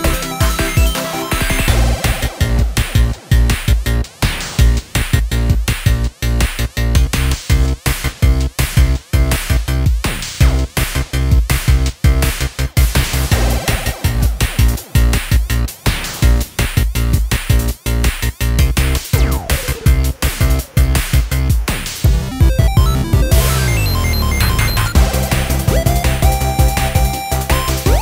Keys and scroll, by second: 1.1-2.1 typing, 4.2-5.1 typing, 11.3 typing.